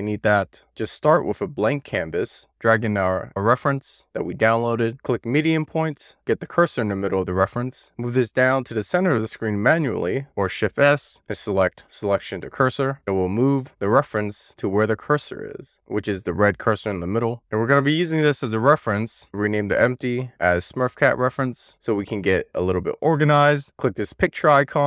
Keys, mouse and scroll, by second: 0.0 x, 0.5 alt+middle click, 1.1 shift+middle click, 4.7 click, 5.3-6.6 drag, 8.6 click, 10.1 shift+s, 15.1 click, 17.7-23.0 drag, 19.5 BackSpace, 22.5 e, 24.8 click.